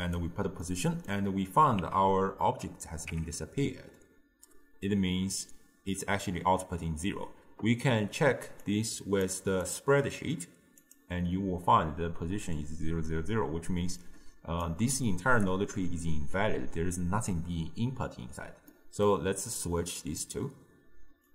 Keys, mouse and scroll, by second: 0.7-2.0 middle drag, 2.0 Tab, 3.2 Tab, 8.7-12.7 drag, 14.0-17.1 drag, 18.7 scroll up 1, 18.7-19.6 middle drag, 19.6 click.